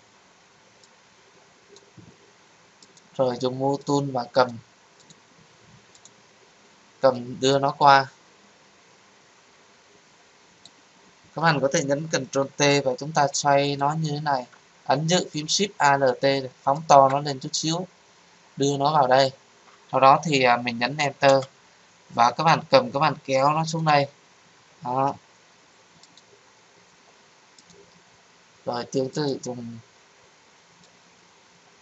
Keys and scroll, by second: 12.2 ctrl+t, 21.2 Return.